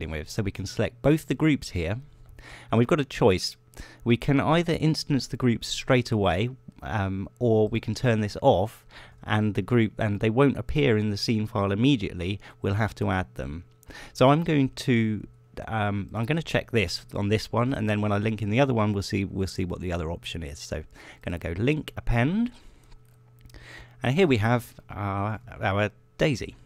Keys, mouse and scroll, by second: 1.0 click, 2.1 shift+click, 9.3 click, 17.9 click, 23.1 click, 24.9 middle click, 25.6 middle click.